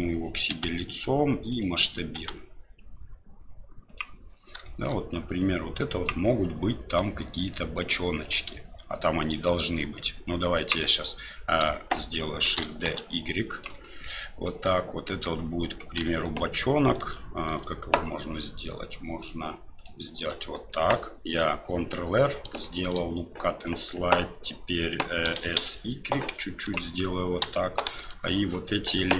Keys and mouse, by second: 0.5 s, 2.1 s, 4.7 shift+middle click, 5.4 click, 6.3 middle click, 7.4-10.7 drag, 12.4 shift+d, 13.9 shift+middle click, 14.3 middle click, 15.2 Tab, 17.5 ctrl+r, 22.6 shift+click, 25.2 s, 27.4 3, 28.0 alt+right click.